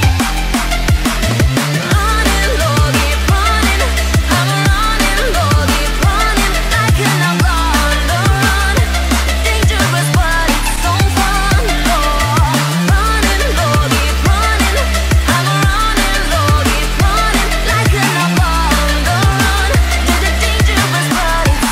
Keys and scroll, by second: 0.5 ctrl+j, 10.7 ctrl+alt+z, 17.5 ctrl+a.